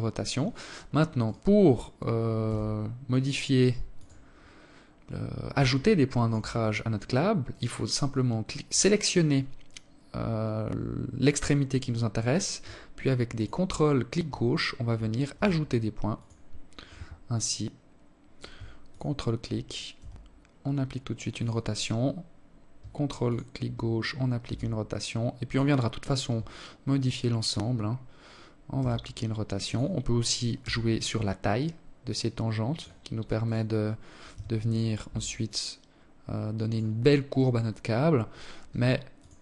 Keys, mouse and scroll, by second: 1.1 r, 2.9 scroll down 2, 4.4 alt+shift+click, 6.0 right click, 7.2 right click, 11.8 ctrl+click, 14.0 r, 15.0-15.4 scroll down 2, 15.5 scroll up 1, 17.4 ctrl+click, 18.4 r, 21.8 ctrl+click, 23.0 r, 25.5 ctrl+click, 27.3 r, 29.2 s, 31.9 right click, 32.8 g, 33.6 s, 35.8 right click, 37.7 ctrl+click, 38.7 r.